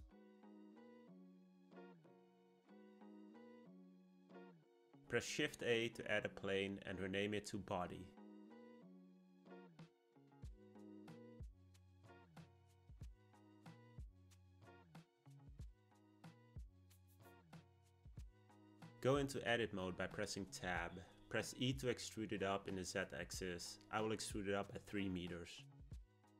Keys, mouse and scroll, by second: 4.5 shift+a, 10.4 click, 10.5-13.7 drag, 16.1 click, 16.5 click, 18.7 Tab, 24.0 e.